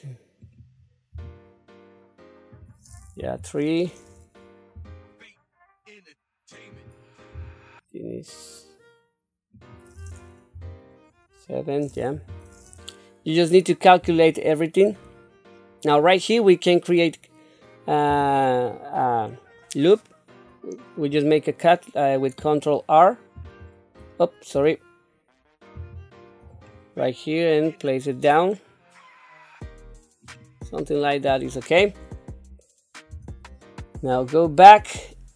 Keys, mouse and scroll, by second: 1.1 s, 3.2 KP_3, 4.7 g, 7.3 s, 10.5 KP_7, 12.1 KP_3, 14.0 Tab, 14.9-15.6 scroll up 3, 18.1 2, 23.3 ctrl+e, 25.7 ctrl+r, 33.1 Tab.